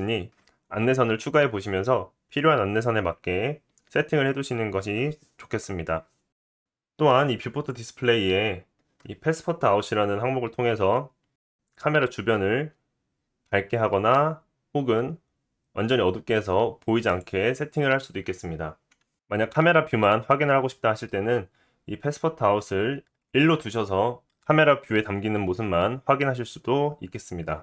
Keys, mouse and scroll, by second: 1.2 click, 3.3 click, 3.7 click, 4.3 click, 4.7 click, 6.6-27.6 drag.